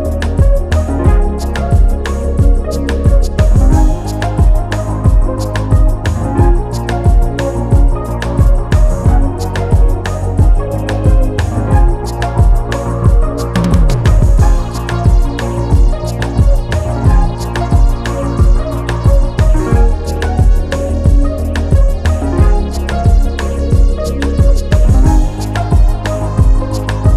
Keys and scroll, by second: 19.1 ctrl+alt+z, 23.9 ctrl+j.